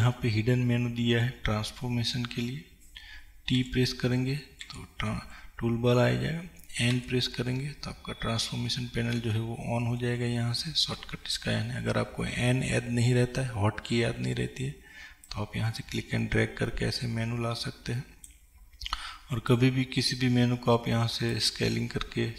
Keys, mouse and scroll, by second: 7.0 n.